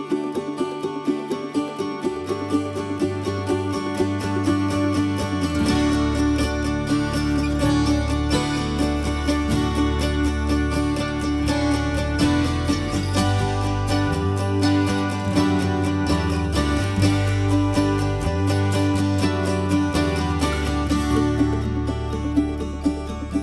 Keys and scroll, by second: 0.2 ctrl+v, 4.2 ctrl+s, 16.0 ctrl+x, 16.3 ctrl+v, 17.1 ctrl+s, 22.4 ctrl+z, 23.2 ctrl+x.